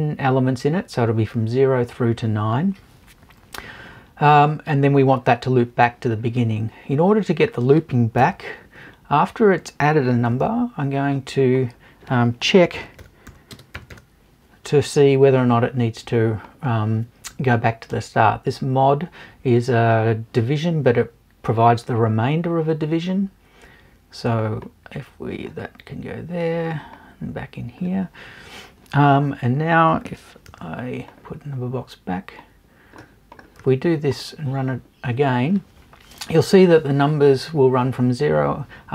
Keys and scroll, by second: 8.2 BackSpace.